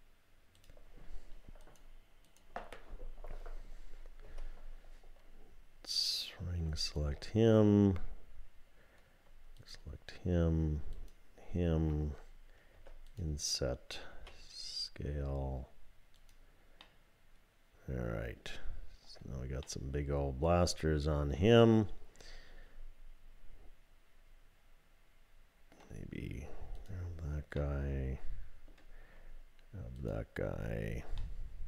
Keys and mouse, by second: 2.2 click, 4.3 3, 6.8 alt+click, 9.6 alt+shift+click, 11.0 alt+shift+click, 12.8 i, 14.1 s, 16.8-18.4 drag, 19.6 click, 20.3-25.8 middle drag, 26.8 click, 27.7-28.7 middle drag, 31.2-31.6 drag.